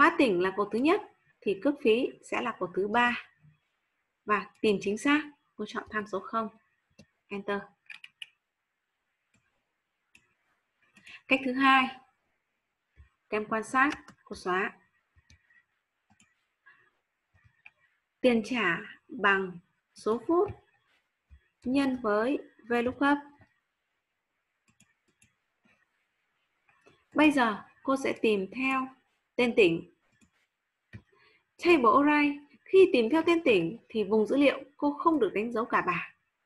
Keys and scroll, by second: 13.9 ctrl+space, 21.6 shift+8.